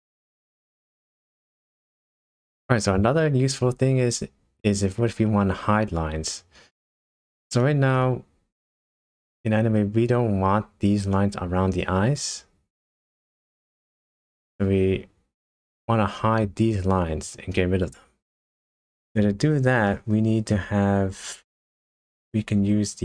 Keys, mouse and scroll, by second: 7.0-7.4 scroll up 3, 7.6-8.0 scroll down 2, 8.0 middle click, 8.8 scroll up 2, 13.9 middle click, 17.5 middle click, 18.6-19.5 scroll up 1, 19.5 scroll down 2, 19.9 middle click, 20.6 scroll up 1, 22.0 click.